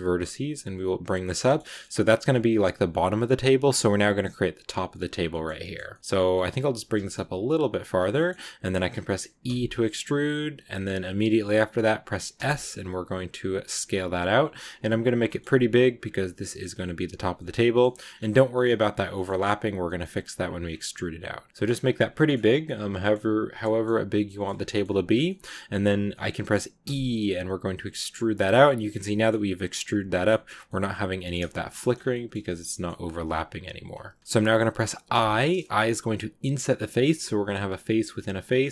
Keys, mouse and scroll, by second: 1.1 scroll down 2, 1.3-3.2 shift+middle drag, 3.2 scroll up 2, 3.5-5.2 scroll down 1, 5.2-6.4 middle drag, 6.4 scroll down 2, 6.6 g, 8.0-9.3 middle drag, 9.3 e, 15.1 middle click, 15.5 s, 16.1 middle click, 16.8 s, 17.4 middle click, 18.0 scroll up 6, 18.2 middle click, 18.8 scroll down 2, 19.0-20.1 middle drag, 20.1 s, 20.5 scroll down 2, 20.7 middle click, 21.6 s, 22.0-24.1 middle drag, 24.1-24.5 scroll up 2, 24.2 middle click, 24.5 middle click, 24.8 s, 25.1 scroll up 1, 25.1 middle click, 25.7-26.0 scroll up 1, 26.0 middle click, 26.7 e, 28.9-31.4 middle drag, 31.4-31.7 scroll up 1, 31.7 middle click, 31.8 scroll down 2, 32.0-34.1 middle drag, 34.1-35.0 scroll up 1, 35.0 i.